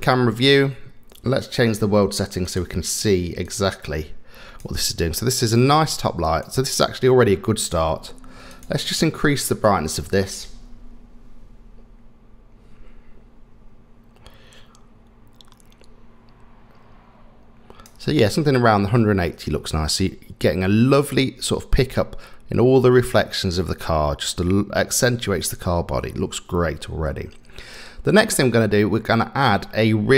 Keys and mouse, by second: 2.4 click, 3.5-4.6 drag, 5.7 click, 6.3 click, 9.6-17.8 drag, 28.5-30.1 middle drag.